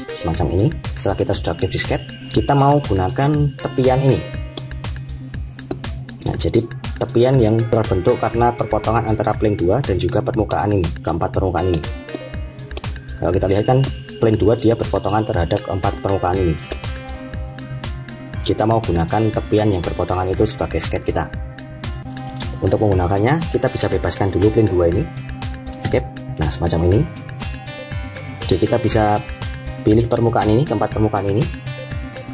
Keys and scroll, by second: 25.6 Escape.